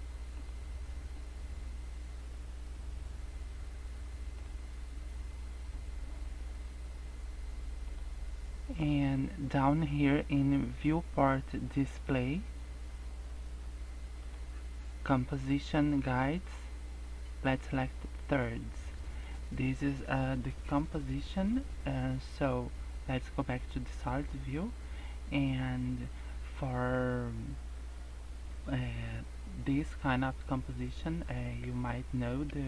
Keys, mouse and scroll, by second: 0.3 click, 3.3 scroll down 3, 4.3 click, 5.7 scroll down 1, 6.0 scroll up 4, 7.9 click, 12.3-12.9 scroll down 3, 14.1 scroll down 1, 14.2 click, 15.9 click, 17.8 click, 18.8 scroll down 1, 19.1 scroll up 2, 23.9 click, 24.7 scroll down 3, 24.9 scroll up 2.